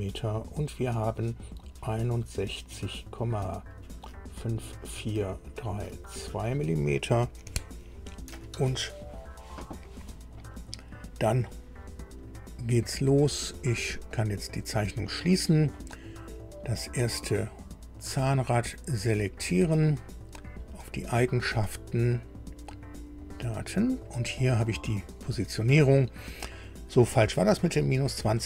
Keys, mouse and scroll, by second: 14.1 click, 16.9 scroll up 2, 18.1 click, 20.7 click, 23.2 click, 27.8 click.